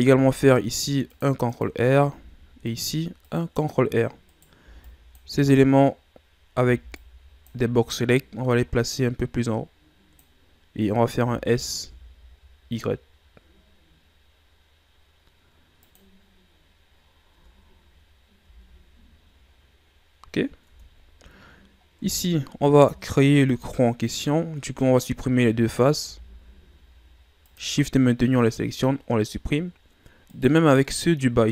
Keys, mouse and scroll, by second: 0.0 ctrl+r, 2.1 ctrl+r, 3.5 click, 4.3 right click, 4.6 b, 6.6 b, 8.5-11.2 drag, 11.2 s, 16.1-17.0 scroll down 5, 17.0 scroll up 4, 17.3 Tab, 18.4 z, 18.9-20.0 scroll down 4, 20.0 scroll up 4, 20.6 Tab, 21.3-22.1 scroll up 1, 22.1-22.8 ctrl+scroll down 2, 22.8 ctrl+Tab, 24.0 right click, 24.8 shift+right click, 26.0 x, 28.2 scroll down 3, 28.4-29.7 middle drag, 29.7-30.3 scroll up 3, 30.3 right click, 30.8-31.5 middle drag.